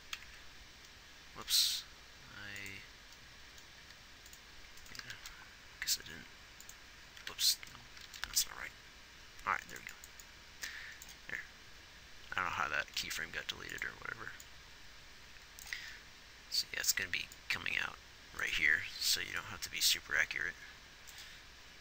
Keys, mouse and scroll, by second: 0.7 Left, 5.4 shift+d, 7.7 ctrl+z, 8.4 shift+d.